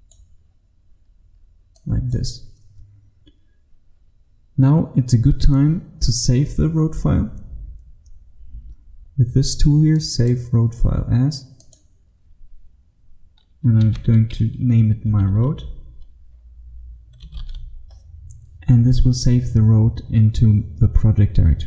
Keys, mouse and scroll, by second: 13.6-15.2 typing, 17.0-18.0 typing.